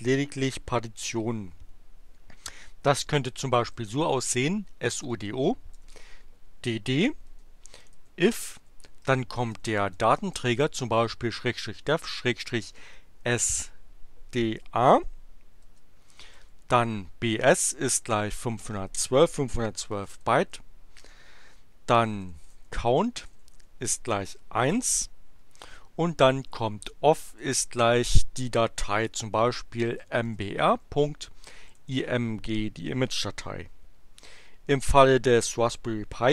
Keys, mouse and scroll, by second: 3.8-5.7 typing, 7.2-10.8 typing, 11.9-13.4 typing, 15.6-18.8 typing, 19.9-23.9 typing, 25.6-27.3 typing, 29.7-32.3 typing.